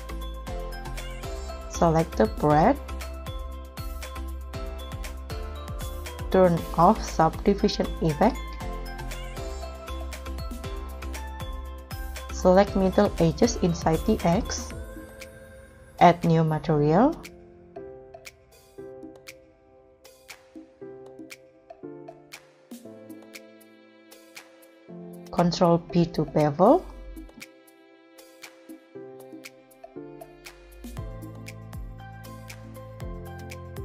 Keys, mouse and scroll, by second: 0.1 ctrl+s, 3.1-4.4 scroll up 6, 9.4-9.9 scroll up 8, 9.9 middle click, 10.9-11.8 scroll up 8, 12.2-13.8 scroll up 1, 19.4 shift+click, 19.9 shift+click, 20.9 shift+click, 21.9 shift+click, 22.8 shift+click, 23.9 shift+click, 24.4 shift+click, 24.5 scroll up 1, 25.2 ctrl+b, 29.5 middle click, 31.3 s.